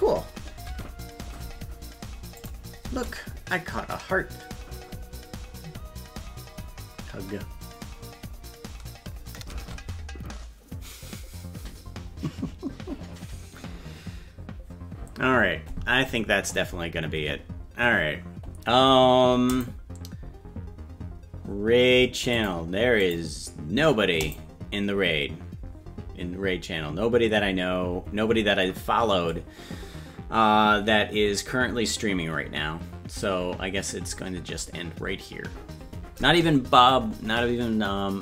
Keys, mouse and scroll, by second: 0.7 space, 2.4 click, 2.8 space, 9.5 space.